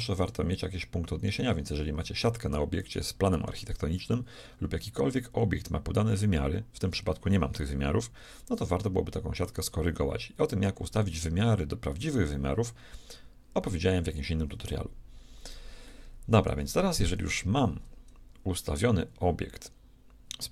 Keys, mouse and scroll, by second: 8.8 shift+middle click, 16.7 shift+middle click.